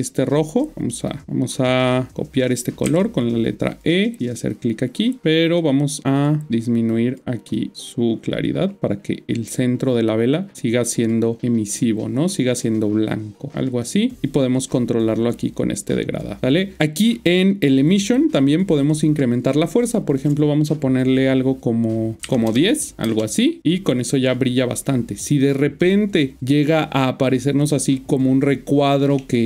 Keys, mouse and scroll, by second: 2.8 typing, 3.7-17.8 click, 23.0 Return, 29.1 middle click.